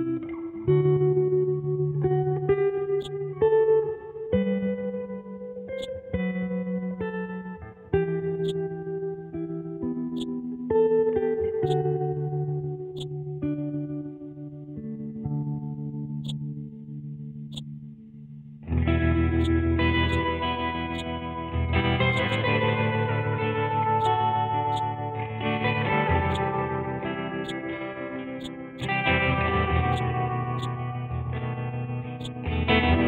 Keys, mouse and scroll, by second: 3.0-5.4 drag, 5.8-8.4 drag, 8.4-16.2 drag, 16.2-19.4 drag, 24.0 click, 26.3 click, 27.4-29.9 drag.